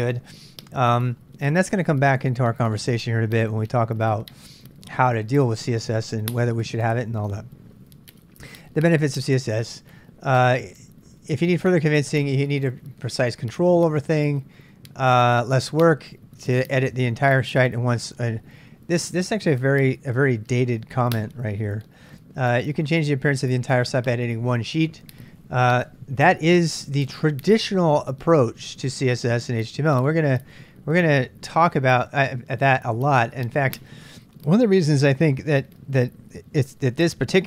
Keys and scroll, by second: 9.2 j, 9.3 j.